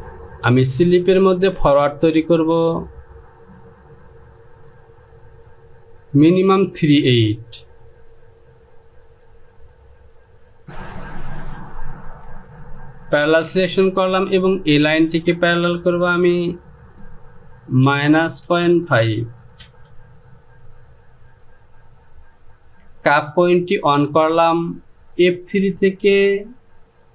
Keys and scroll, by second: 17.8 KP_Subtract, 18.4 KP_Decimal, 18.8 KP_5, 19.5 Return.